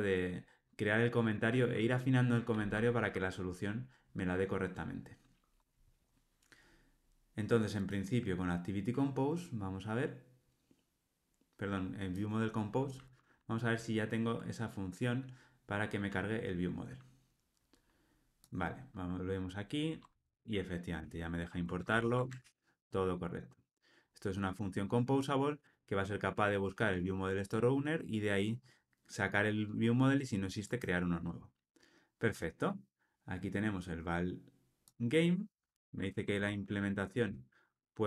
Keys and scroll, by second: 20.3 alt+Return, 22.3 ctrl+alt+o, 36.3 alt+Return.